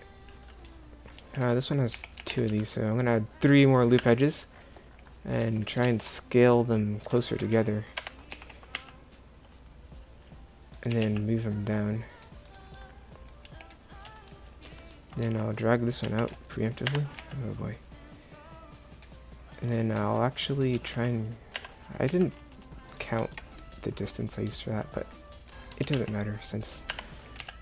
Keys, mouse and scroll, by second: 1.2 a, 2.0 a, 2.2 a, 2.5 ctrl+r, 5.6 s, 8.3 s, 10.9 g, 13.5 a, 15.2 s, 17.2 s, 20.9 g, 22.1 s, 23.3 middle click, 25.9 g, 27.4 z.